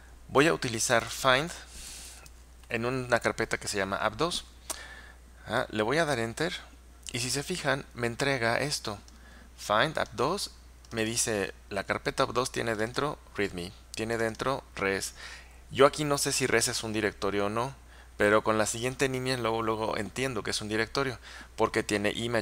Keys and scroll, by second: 0.8-3.2 typing, 6.2 Return.